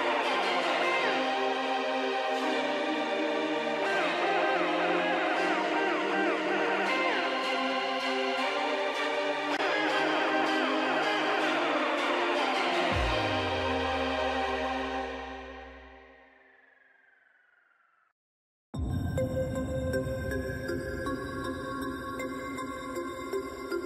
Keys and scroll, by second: 7.9 ctrl+g, 11.9 space, 12.6 ctrl+space, 15.8 shift+space, 16.7 shift+space, 20.7 ctrl+shift+space.